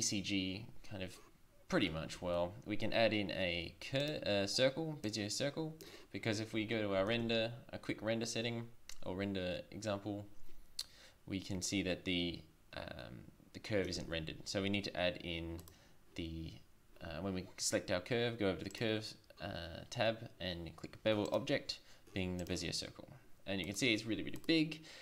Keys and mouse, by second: 2.2 shift+a, 5.1-6.9 drag, 7.2 shift+z, 14.0 shift+z, 15.6 right click, 18.7-20.9 drag, 21.3 click, 22.5 click, 22.9 drag, 23.7-24.9 drag.